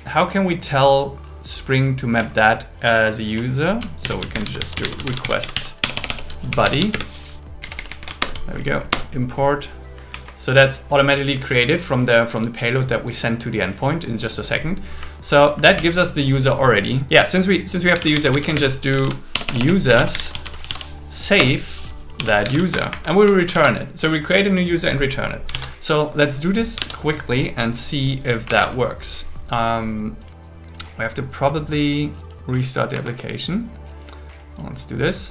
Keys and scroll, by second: 2.2 Left, 4.0 alt+l, 4.3 shift+r, 5.2 shift+b, 5.8 BackSpace, 6.9 space, 7.6 Left, 8.2 alt+Return, 10.1 Right, 15.0 Right, 15.5 Right, 15.7 Down, 18.5 space, 19.3 BackSpace, 20.1 BackSpace, 21.4 Return, 22.5 Escape, 22.7 Escape, 23.3 Right, 23.5 super+s, 25.5 super+s, 26.9 super+1, 33.6 Escape.